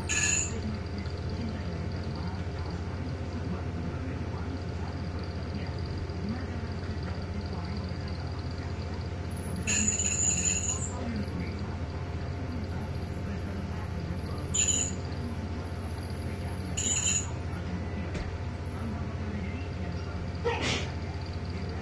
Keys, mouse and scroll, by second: 1.3 1, 2.7 2, 3.5-4.7 drag, 6.9 ctrl+c, 9.0 click, 10.0 click, 11.1 right click, 12.0 click, 16.3 click, 17.7 2, 18.2 Return, 19.1-20.2 scroll down 1, 20.7-21.1 ctrl+scroll down 1, 21.6-21.8 scroll up 2.